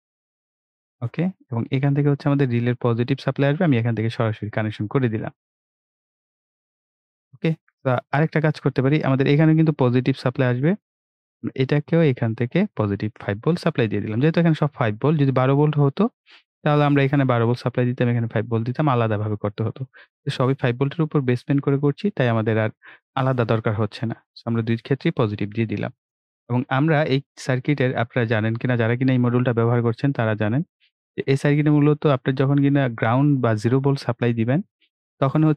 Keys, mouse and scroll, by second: 8.7 click, 8.7 click, 19.8 right click, 21.8 scroll down 1, 24.0 click, 27.6 click.